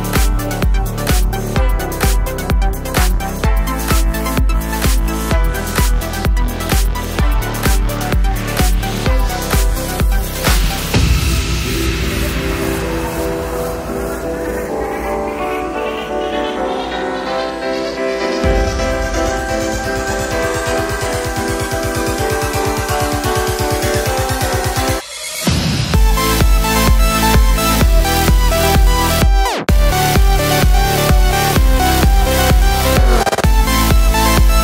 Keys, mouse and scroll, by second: 0.0-9.2 alt+drag, 10.7 click, 12.4 right click, 13.4 click, 15.4 ctrl+z, 15.9 click, 17.0 ctrl+z, 17.5 click, 19.0 click, 22.0 click, 24.5-26.8 drag, 26.8-30.1 shift+drag, 30.1 right click, 31.1 click.